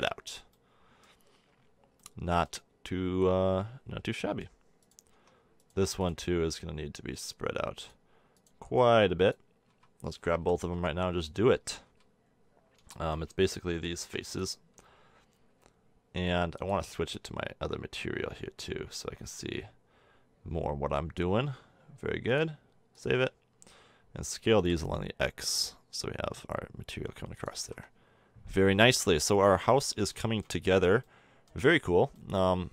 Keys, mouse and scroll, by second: 5.1 Tab, 9.6 a, 10.4 l, 10.7 l, 11.8 a, 12.6-14.9 middle drag, 14.0 b, 15.4 a, 16.5-18.7 drag, 22.2-24.0 drag, 24.0 middle click, 24.5 s, 27.5 a, 27.6 Tab, 29.2 a.